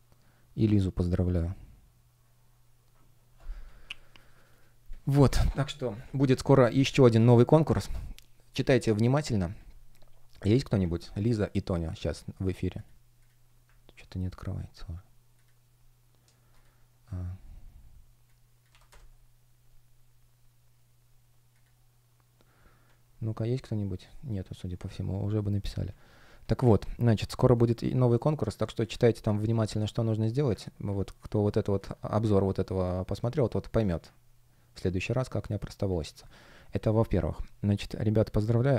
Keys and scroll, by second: 13.6 super+r, 18.5 Delete, 18.7 Return, 29.5 space, 30.8 space, 34.8 space.